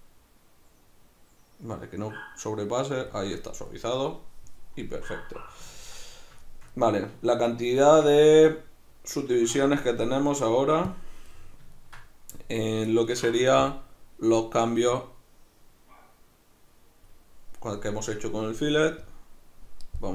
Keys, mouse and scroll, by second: 7.9 Tab, 8.3 z, 9.6 Escape, 11.3-13.6 middle drag, 13.6-20.0 drag, 20.0-20.1 middle drag.